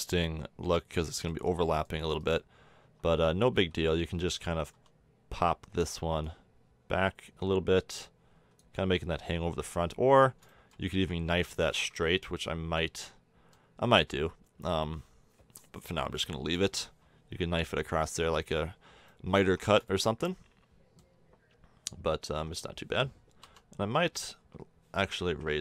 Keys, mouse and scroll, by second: 2.8 Tab, 3.5 a, 4.7 l, 8.9 a, 9.1 Tab, 10.0 Tab, 15.2-16.4 middle drag, 19.4 Tab, 22.3 Tab, 23.4 l, 25.2 a.